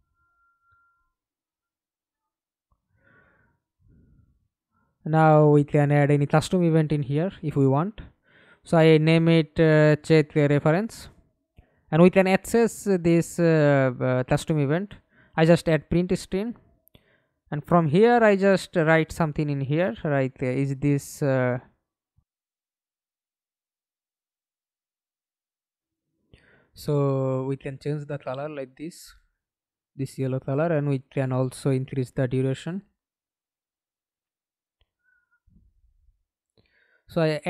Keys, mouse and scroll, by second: 0.6 right click, 3.6-4.6 typing, 6.1-9.8 typing, 11.7-13.2 typing, 13.4 Return, 17.8 Return, 17.8-23.1 typing, 23.5-24.5 scroll up 7, 24.5-25.5 scroll up 1, 31.7 5, 32.0 Return.